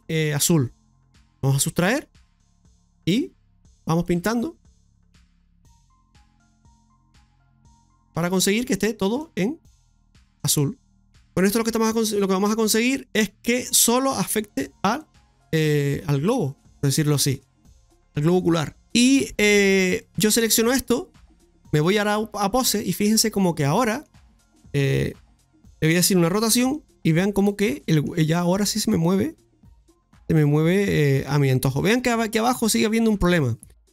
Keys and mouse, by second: 1.9-3.0 drag, 3.1-8.4 drag, 8.7 middle click, 9.3-10.9 drag, 10.9 middle click, 11.6-13.2 drag, 13.5 middle click, 14.1 click, 15.0 middle click, 17.0 shift+middle click, 20.0 right click, 21.1 click, 22.6 right click, 23.4 middle click, 24.8 shift+s, 26.5 r, 27.7 middle click, 28.4 r.